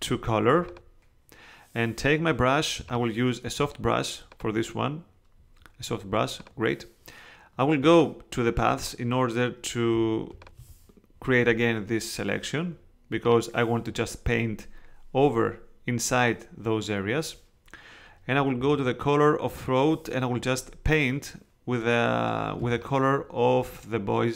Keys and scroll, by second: 22.6 space.